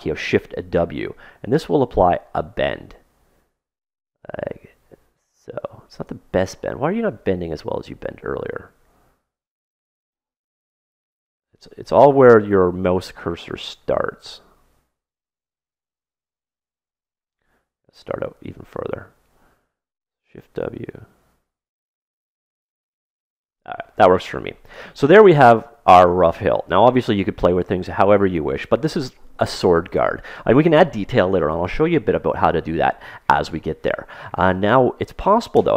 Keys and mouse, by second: 0.1 shift+w, 7.5 ctrl+z, 14.1 shift+w, 18.1-20.6 middle drag, 20.2 shift+w, 25.0-27.4 middle drag, 35.5 KP_3.